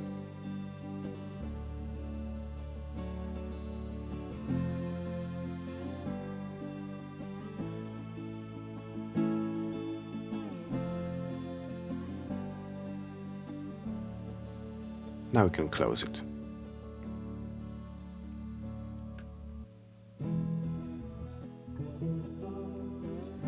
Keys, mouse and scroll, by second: 1.0 click, 14.7 click, 16.7-18.0 drag, 18.6 click, 20.2 click, 22.2 click.